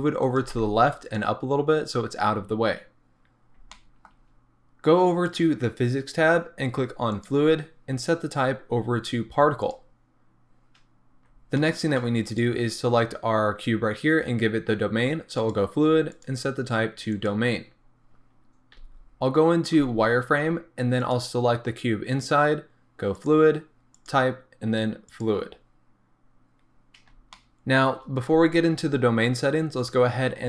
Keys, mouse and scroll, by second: 0.4 click, 0.5 g, 1.2 click, 2.7-3.1 scroll down 1, 3.1 scroll up 1, 3.6 scroll down 1, 3.8-5.3 shift+middle drag, 5.3 click, 7.1 click, 8.0-11.6 drag, 11.6-12.3 shift+middle drag, 12.3 click, 15.4 click, 16.1-21.1 drag, 18.7 z, 23.2-27.4 drag, 26.5-27.4 scroll up 2, 27.4-29.8 shift+middle drag, 29.8 click.